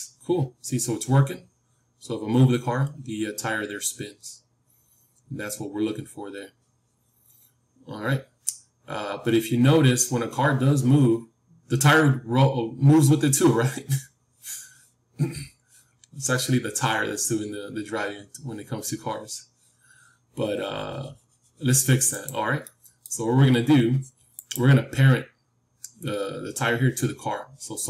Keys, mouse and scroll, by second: 22.6-25.2 middle drag, 24.2-26.7 drag.